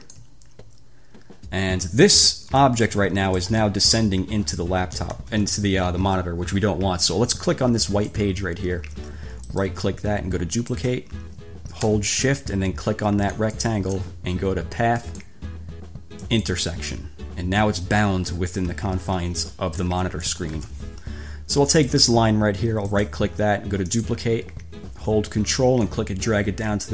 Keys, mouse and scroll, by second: 2.2 click, 2.8-3.8 drag, 5.3 ctrl+z, 8.1 click, 9.7 click, 10.8 click, 13.5 shift+click, 15.3 click, 16.5 click, 18.7 ctrl+scroll up 2, 20.0-20.7 drag, 20.8 ctrl+z, 21.9 click, 23.1 right click, 24.1 click, 26.0-26.9 ctrl+drag.